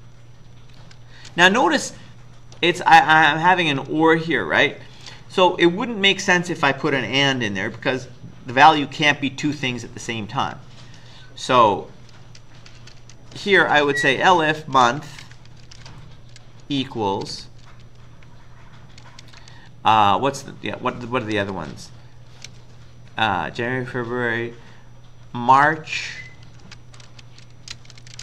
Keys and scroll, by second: 0.0-1.2 typing, 2.0 Up, 2.3-3.0 typing, 3.4 Right, 3.5 Right, 11.3 Down, 11.6 Down, 12.2 Left, 12.6 Left, 12.8 Left, 13.0 Left, 14.4-17.3 typing, 19.2 typing, 21.3 typing, 22.5 typing, 25.3-28.2 typing.